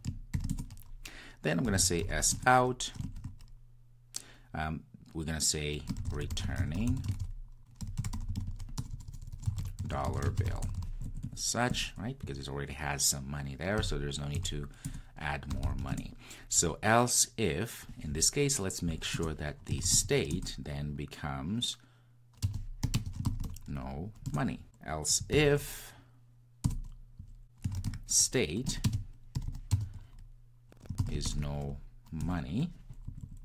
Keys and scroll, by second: 14.9 Return, 20.4 Return, 28.6 Return.